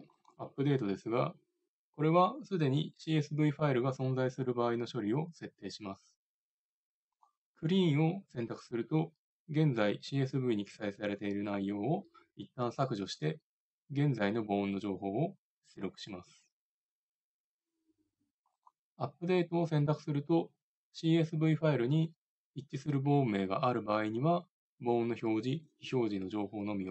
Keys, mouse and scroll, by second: 18.5-26.9 drag.